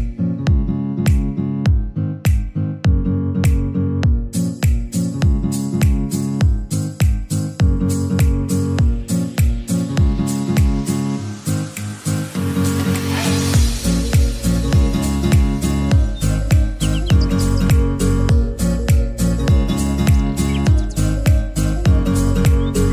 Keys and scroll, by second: 14.4-15.6 typing, 16.8-19.8 typing.